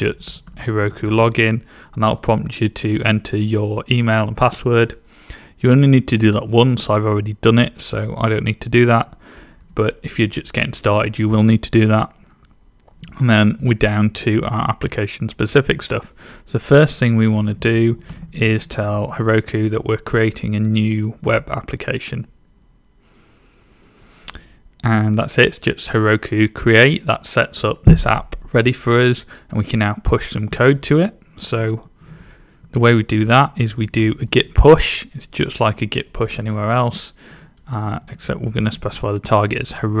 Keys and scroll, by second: 0.0-1.7 typing, 17.1-19.7 typing, 31.7-34.6 typing, 37.0-40.0 typing.